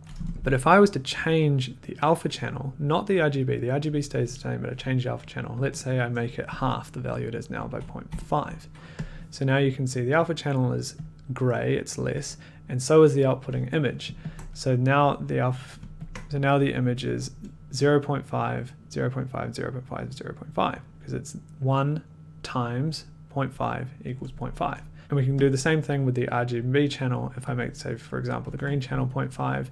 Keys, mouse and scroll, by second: 5.9 click, 7.8-8.5 typing, 9.0 click, 10.7 click, 11.0 click, 14.3 ctrl+click, 16.0 click, 25.0 click, 25.4 click, 27.5 click, 28.3-29.0 typing, 29.3 click.